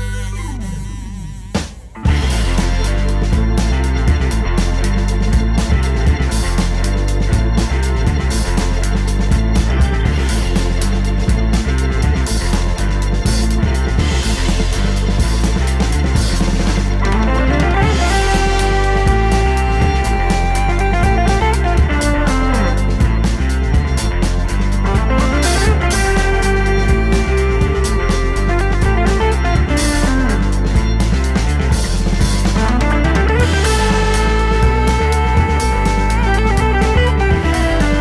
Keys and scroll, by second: 16.8-20.2 typing, 29.7 d, 37.1 super+c, 37.3 super+v.